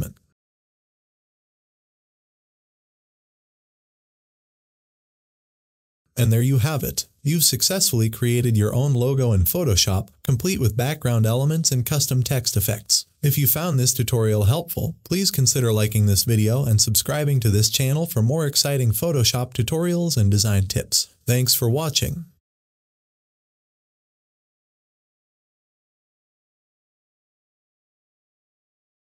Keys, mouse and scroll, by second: 1.1 shift+click, 2.2 Left.